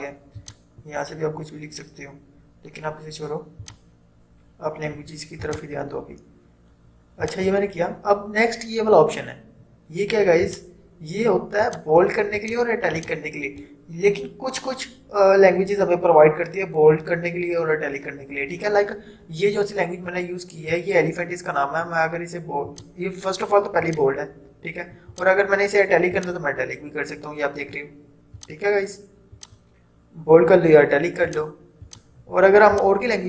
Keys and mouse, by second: 0.5 click, 3.7 click, 10.6 click, 22.8 click.